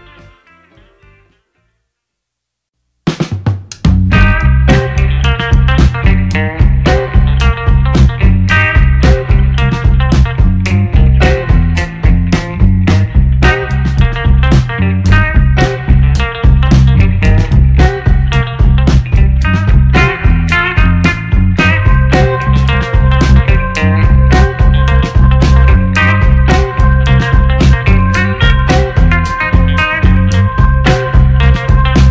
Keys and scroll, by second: 0.5-1.1 typing, 1.2 Return, 2.1 ctrl+a, 3.0 a, 3.3 i, 3.5 o, 3.7 n, 3.8 Return, 31.1 Delete.